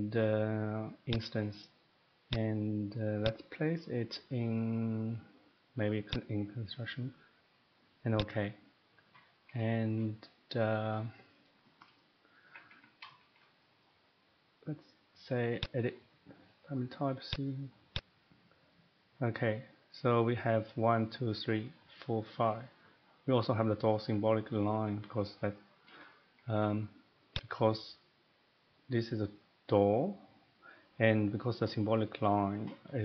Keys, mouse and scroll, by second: 6.1 click, 8.2 click, 9.3 middle click, 9.5 middle click, 9.5 scroll, 9.9 shift+middle click, 11.3 middle click, 12.0 middle click, 12.4 Escape, 12.6 Escape, 12.7 Escape, 13.4 shift+middle click, 13.8 middle click, 15.6 click, 17.3 click, 18.0 click, 26.3 Escape, 26.4 Escape, 26.6 Escape, 27.4 click, 30.9 Escape.